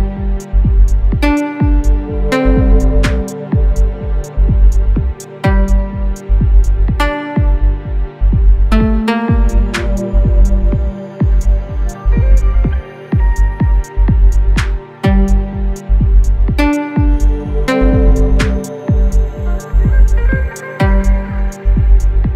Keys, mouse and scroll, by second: 1.0 ctrl+space, 1.1 ctrl+click, 1.6 space, 1.9 click, 2.1 space, 4.0 click, 6.7 Up, 12.5 click, 16.3 click.